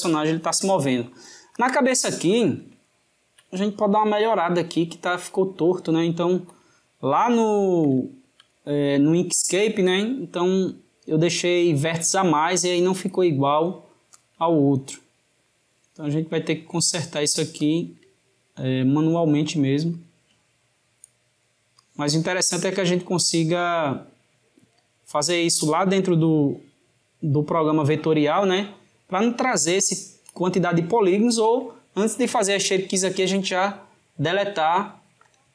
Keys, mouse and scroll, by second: 0.9-2.3 drag, 2.7-4.1 ctrl+middle drag, 4.1-5.6 drag, 5.6-9.7 ctrl+middle drag, 9.7 click, 14.0 click, 17.3 click, 19.8 click, 21.6 click, 31.5 ctrl+middle click, 32.2-34.1 shift+middle drag, 34.1-35.4 drag, 35.4-35.5 ctrl+middle drag.